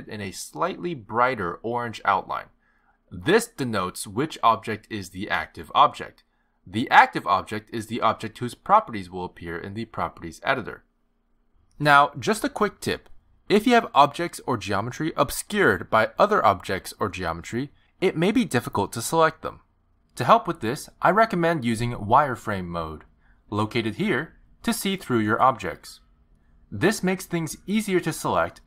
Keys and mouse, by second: 0.0 shift+click, 3.1 shift+click, 5.6 shift+click, 11.5 shift+click, 13.2 click, 14.7 click, 15.7 click, 16.2 click, 17.0 click, 17.5 click, 18.0 click, 18.6 click, 19.0 click, 19.4 click, 19.7 click, 20.2 click, 20.5 click, 20.8 click, 24.4 click, 26.4 click, 27.9 click.